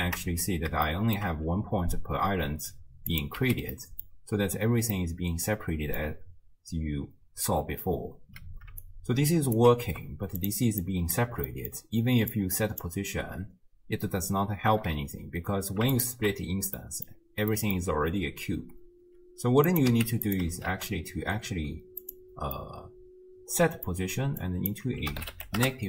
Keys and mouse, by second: 0.0 ctrl+shift+click, 1.0 shift+click, 3.4 x, 3.9 middle click, 5.0-6.0 middle drag, 8.9 shift+click, 9.8 g, 10.9 click, 11.6 middle click, 12.4 click, 16.0 ctrl+shift+click, 16.9 middle click, 17.7 middle click, 19.7 click, 19.9 x, 20.7 shift+d, 22.6-23.8 drag, 22.6-23.8 middle drag, 22.6-23.8 right drag, 24.6-25.8 drag.